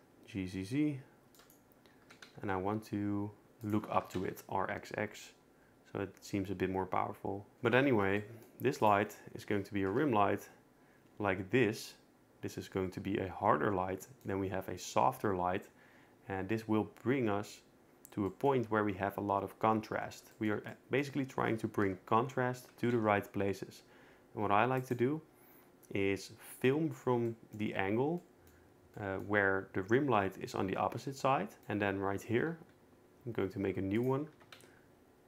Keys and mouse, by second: 2.0 g, 2.3 z, 3.6 click, 4.0 r, 4.2 x, 4.3 x, 7.8 a, 9.9 KP_0, 21.8 KP_0, 22.7 r, 23.0 z, 28.2 middle click, 29.0 middle click, 32.3 shift+d, 34.3 r, 34.5 z.